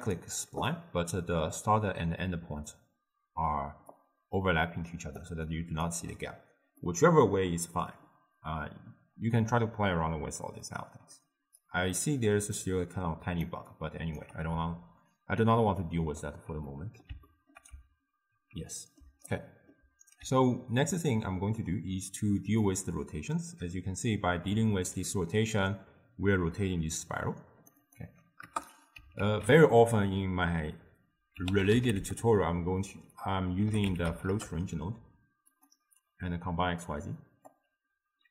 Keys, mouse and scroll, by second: 4.0-5.5 drag, 5.5-6.9 right drag, 6.9-12.4 middle drag, 12.4 d, 12.7-13.7 drag, 13.7-22.8 right drag, 22.8-25.8 drag, 28.5-34.4 drag, 37.5-38.3 drag.